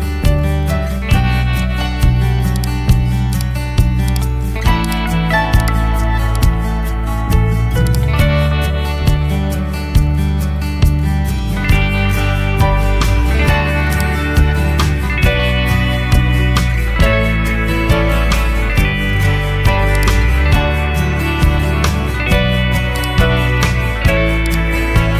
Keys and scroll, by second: 15.7-17.4 typing.